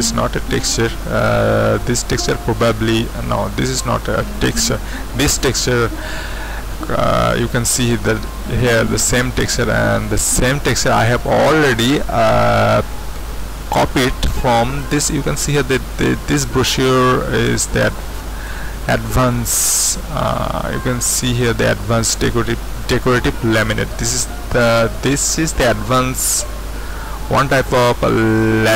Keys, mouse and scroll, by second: 0.3-1.8 scroll up 2, 3.3-5.4 scroll down 2, 5.4-7.3 scroll up 2, 14.1-15.0 scroll up 2, 15.0-16.1 scroll up 1, 16.1-17.0 scroll down 2, 17.1-17.9 scroll up 2, 17.9-20.1 drag, 20.2-20.9 scroll up 2, 20.9 click, 25.9-27.2 scroll up 1, 27.2-27.7 scroll up 1, 27.7-28.6 scroll down 1.